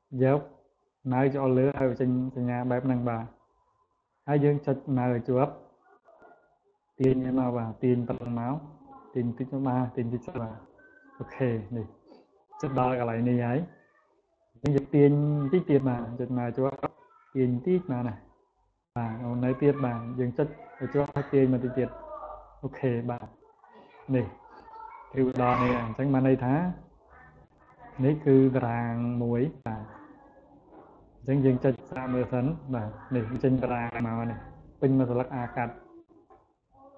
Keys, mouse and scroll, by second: 4.9-10.4 drag, 15.1-18.1 drag, 20.0-21.8 drag, 23.3 click, 24.0 click, 26.7-27.1 scroll down 2, 27.6 scroll down 2, 28.2-28.7 scroll up 2, 29.0 scroll down 2, 31.4 click, 35.9 click.